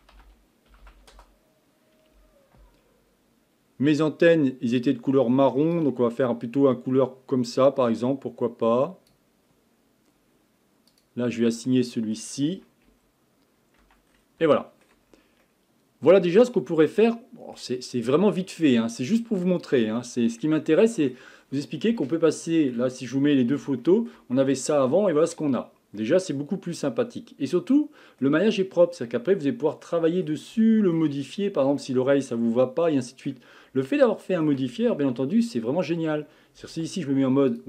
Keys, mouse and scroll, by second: 0.8 n, 4.8 click, 10.9 click, 11.7-12.9 middle drag, 12.9 ', 13.8 Tab, 14.1-14.5 scroll down 4, 14.5-15.1 shift+middle drag, 15.1-15.4 scroll up 4, 15.4-18.4 middle drag, 18.4-18.8 scroll up 1, 18.8-19.6 middle drag, 19.6-20.0 scroll down 1, 20.0-21.4 shift+middle drag, 21.4-22.0 scroll down 2, 22.0-28.5 shift+middle drag, 28.5-29.0 scroll up 2, 29.0-29.3 scroll down 2, 29.3-31.2 middle drag, 31.2-31.8 scroll up 2, 31.8-33.4 shift+middle drag, 33.4 scroll up 1, 33.6-33.9 scroll down 1, 33.9-35.0 shift+middle drag, 35.0 Tab, 36.7 z.